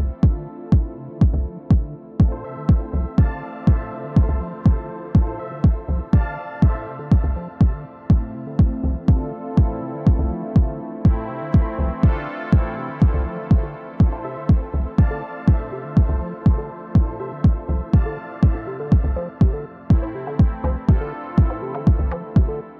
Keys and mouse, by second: 1.6 alt+click, 2.2 alt+click, 3.7-4.5 alt+drag, 4.7 alt+click, 5.4 alt+click, 6.4 alt+click, 6.4 alt+right click, 9.5 click, 12.0-13.1 drag, 14.2-14.6 alt+drag, 15.1 click, 15.6-17.1 drag, 17.7-18.8 alt+drag, 19.3 click.